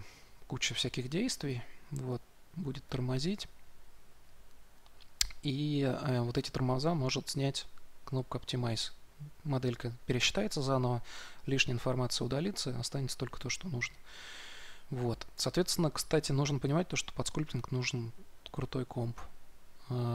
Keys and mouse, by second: 2.0 middle click, 2.8-14.4 drag, 14.4-20.1 middle drag.